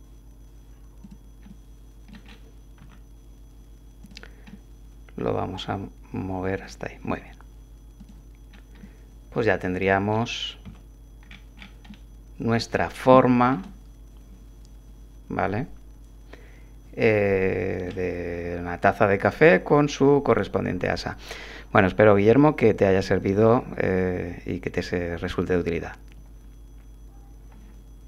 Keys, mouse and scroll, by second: 1.0 click, 1.5 click, 2.2 middle click, 2.5-2.8 scroll up 1, 2.8 z, 4.0 click, 4.5-6.8 drag, 7.1 Tab, 8.0 click, 8.5 middle click, 8.8-10.3 drag, 10.6 a, 11.3 middle click, 11.9 click, 13.2-18.0 shift+drag.